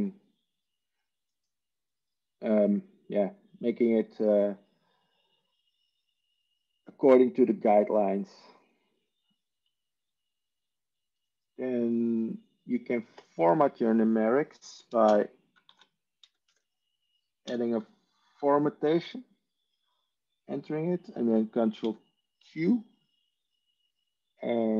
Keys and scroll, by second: 15.2 ctrl+space, 15.6-17.4 typing, 21.7 ctrl+q.